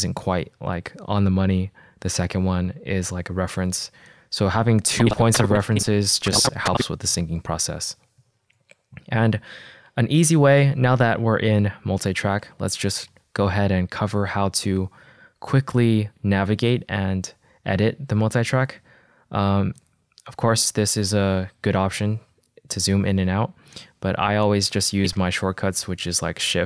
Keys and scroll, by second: 12.9 -.